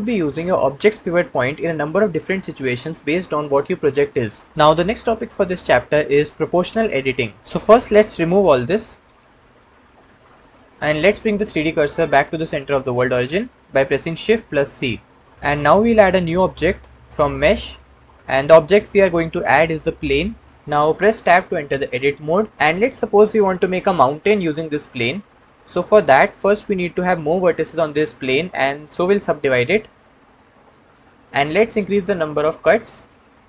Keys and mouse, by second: 8.4 a, 8.9 c, 10.0 x, 14.4 shift+c, 16.5 shift+a, 21.6 Tab, 29.9-30.9 right drag, 30.9 click, 32.4 click, 32.6 click, 32.8 click, 33.1 click, 33.3 click.